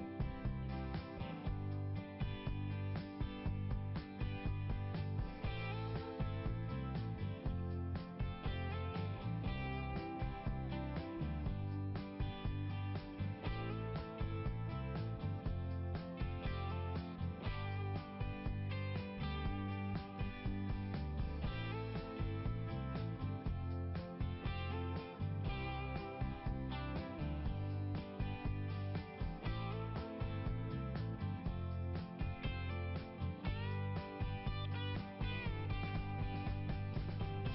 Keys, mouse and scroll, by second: 0.3 click, 3.2 click, 4.3 click, 5.3 click, 9.3 click, 10.1 scroll up 1, 16.1 scroll up 1, 18.2 ', 18.2 right click, 18.5 ', 18.6 right click, 20.4 click, 21.3 click, 21.6 click, 21.7 double click, 22.3 click, 22.5 click, 22.7 click, 22.8 double click, 23.8 double click, 24.6 g, 25.8-29.8 typing, 29.7 Return, 29.9 Return, 32.0 click, 36.1 scroll up 1, 36.3 scroll down 1, 36.5-37.5 scroll up 1.